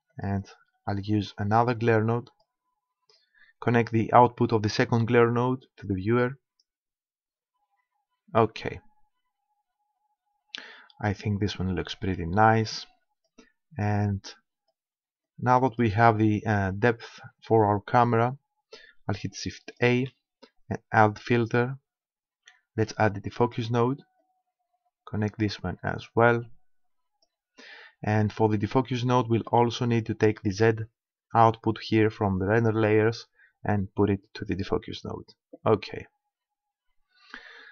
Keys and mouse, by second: 0.3-2.8 drag, 3.2-5.0 drag, 12.6-16.9 drag, 19.7-21.4 drag, 20.0 shift+a, 24.2-26.2 drag, 26.4-28.2 drag, 28.2-31.7 middle drag, 31.7-33.6 drag.